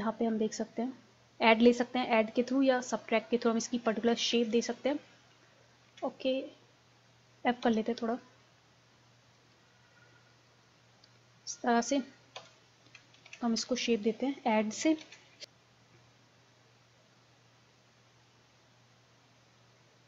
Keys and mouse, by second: 2.0-4.4 drag, 4.4 ctrl+z, 5.9 ctrl+z, 7.6 f, 8.4 click, 12.4 KP_1, 13.3 ctrl+z, 15.0 ctrl+z, 15.4-17.8 drag, 15.4 f.